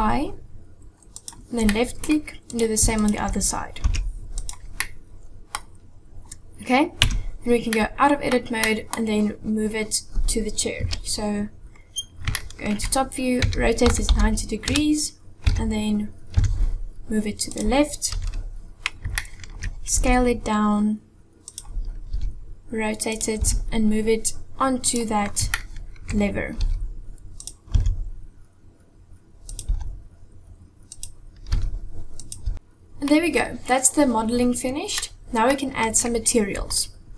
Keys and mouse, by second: 1.6 middle click, 3.0 shift+click, 3.7 i, 4.8 middle click, 6.9 Tab, 7.6-8.2 middle drag, 8.6 middle click, 10.8 KP_7, 12.3-12.9 shift+drag, 13.3 r, 15.4 g, 18.0 KP_1, 19.1 shift+click, 19.9 s, 22.1 r, 23.4 g, 25.5-26.1 shift+middle drag, 26.6 r, 27.7 s, 29.7 g, 31.5 r, 32.3 g, 32.5 click, 32.8 middle click, 34.9-35.4 middle drag, 36.7-37.1 shift+middle drag.